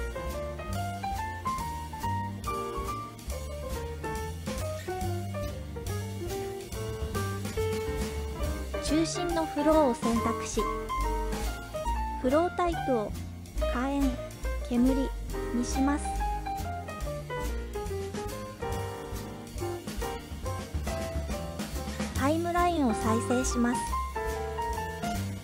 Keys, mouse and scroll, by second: 3.8 space, 6.5 click, 8.6 click, 12.9-15.0 drag, 21.1-22.5 drag, 23.4 space.